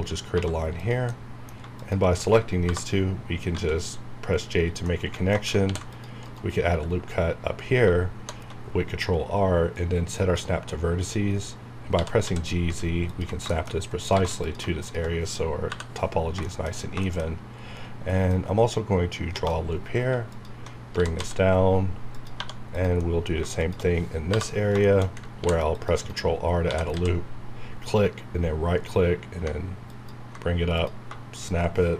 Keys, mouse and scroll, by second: 2.5-3.0 scroll down 2, 2.6 j, 3.5 scroll up 1, 4.6 scroll down 1, 4.9 middle click, 5.7 ctrl+r, 5.9 click, 6.2 right click, 6.5-7.1 scroll down 1, 8.2 ctrl+shift+Right, 9.7 click, 11.0 scroll up 1, 11.9-12.2 typing, 13.1 ctrl+click, 13.5 shift+middle click, 13.7 shift+scroll up 2, 15.3 scroll down 1, 15.9 scroll down 2, 16.4 middle click, 16.8 scroll up 1, 17.0 shift+middle click, 17.3 scroll down 1, 18.3 click, 19.7-20.1 scroll up 1, 20.3 alt+click, 20.7 alt+scroll up 2, 23.0 middle click, 23.2 scroll down 1, 23.6 shift+click, 24.3 j, 24.6 scroll down 1, 24.9 shift+middle click, 25.4 ctrl+r, 27.9-29.5 typing.